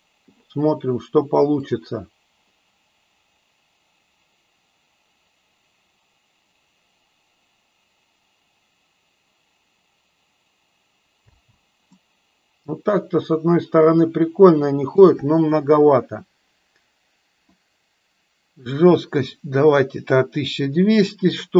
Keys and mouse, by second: 1.8 click, 11.4 space, 11.9-14.9 middle drag, 17.4-20.8 drag.